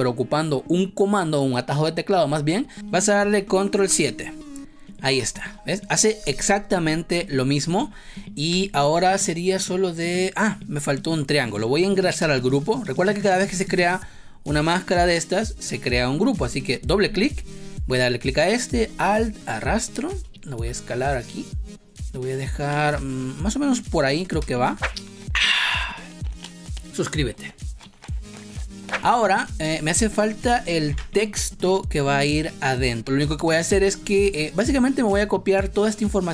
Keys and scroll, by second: 3.7 ctrl+7, 5.3 space, 8.4 space, 12.1 space, 24.3 space, 28.8 space, 30.8 ctrl+s, 33.6 space.